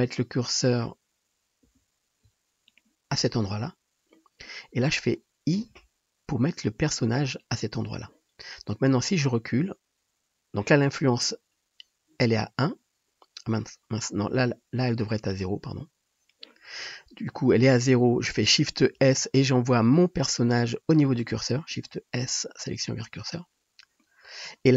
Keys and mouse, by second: 1.6 shift+s, 5.7 i, 18.9 shift+s, 19.8-20.4 shift+drag, 21.7 shift+s, 24.0-24.7 drag.